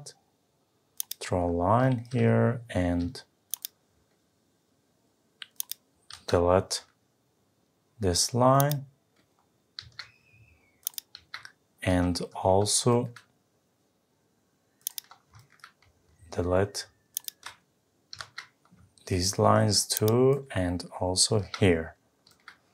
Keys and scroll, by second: 6.1 Delete, 9.8 Delete, 18.1 Delete, 21.3 Delete.